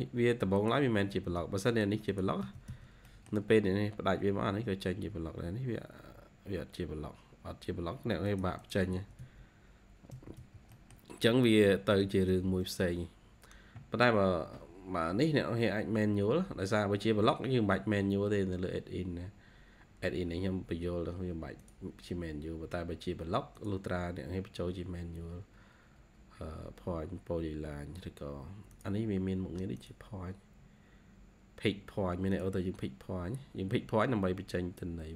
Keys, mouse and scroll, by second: 1.0 Escape, 1.3 Escape, 2.0 double click, 2.3 Escape, 2.6 Escape, 2.9 middle click, 3.3 scroll down 1, 3.8-4.1 scroll up 1, 7.7 scroll up 2, 8.5 double click, 8.8 Escape, 9.1 Escape, 9.3-9.9 scroll down 3, 10.0 Escape, 10.3 Escape, 10.6 middle click, 11.3-11.6 scroll down 2, 11.9 Escape, 12.2 Escape, 12.4-13.4 scroll up 1, 14.8-15.1 scroll up 2.